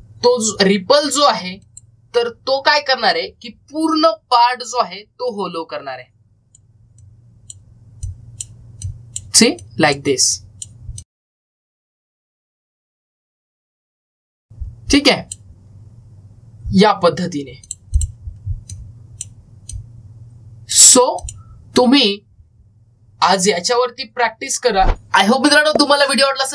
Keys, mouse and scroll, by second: 5.5-13.6 drag, 18.5-24.8 drag.